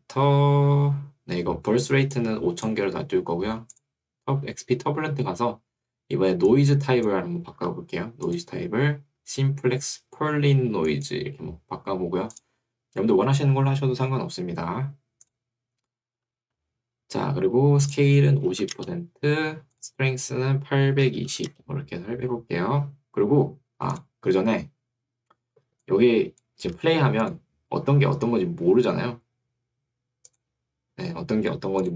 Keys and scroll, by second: 3.0 Escape, 7.6 Escape, 18.6 0, 18.8 Return, 21.0-21.9 typing, 26.8 Escape.